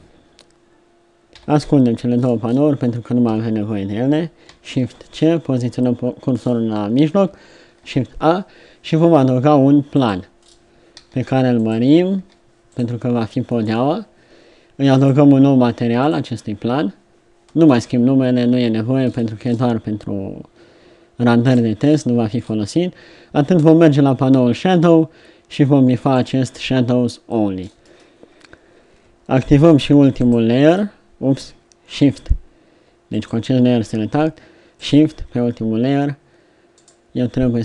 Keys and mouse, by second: 1.3 n, 1.7 t, 3.3 KP_3, 4.9 shift+c, 7.8 shift+a, 10.9 s, 12.1 s, 14.9 click, 26.1-27.9 drag, 30.6 click.